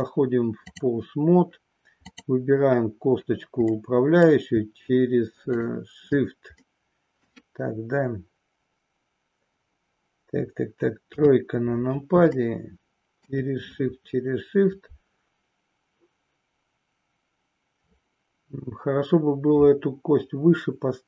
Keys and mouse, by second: 2.0 click, 3.7 middle click, 5.3 shift+click, 6.6 middle click, 11.0 KP_3, 12.3 shift+middle click.